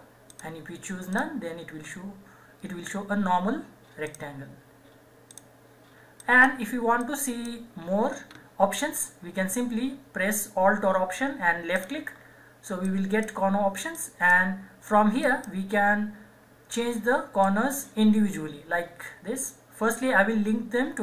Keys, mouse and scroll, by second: 0.3 click, 4.1 click, 10.6 alt+Num_Lock, 10.6 click, 11.8 alt+click.